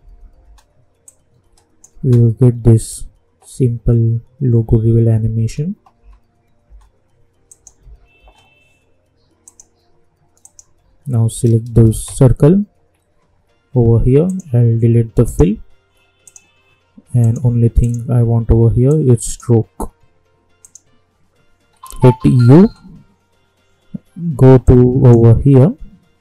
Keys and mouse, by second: 0.4 space, 1.0 click, 2.0 space, 5.3 space, 7.5 click, 7.8 space, 9.4 click, 11.9 ctrl+d, 14.2-20.6 drag, 22.4 u, 24.6 click, 25.3 k.